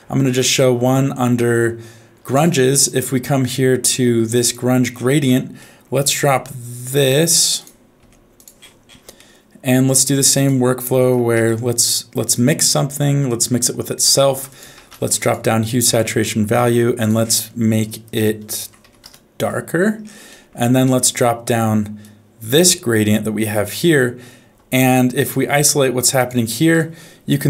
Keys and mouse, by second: 0.4-2.5 drag, 2.8-4.6 drag, 5.6 middle click, 6.2 g, 8.0 g, 9.1 middle click, 10.3 click, 11.3 shift+d, 13.2 click, 14.4 shift+a, 16.6 middle click, 17.0-19.0 drag, 20.4 middle click, 21.0 middle click, 22.0 click, 22.2-23.7 drag, 25.3 middle click, 26.2 ctrl+shift+click.